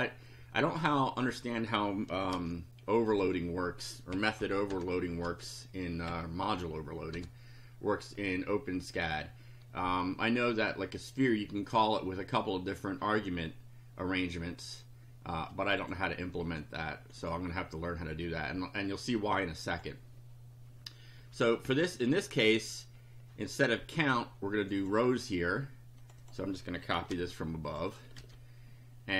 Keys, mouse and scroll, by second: 0.3-1.5 drag, 2.3 ctrl+c, 3.1 click, 4.1 Down, 4.5 End, 4.7 Return, 5.2 ctrl+v, 6.1 Down, 6.6 Home, 7.2 BackSpace, 11.7 click, 15.8 click, 16.4 click, 17.2 click, 19.7 click, 21.2 Up, 24.6 click, 26.0 click, 27.1 ctrl+c, 27.7 ctrl+click, 28.2 ctrl+v.